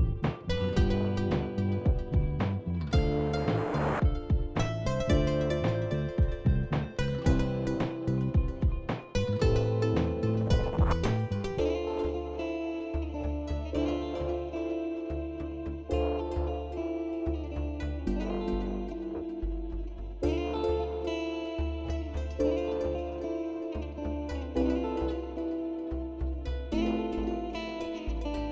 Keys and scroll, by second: 1.4 alt+e, 28.1 ctrl+r.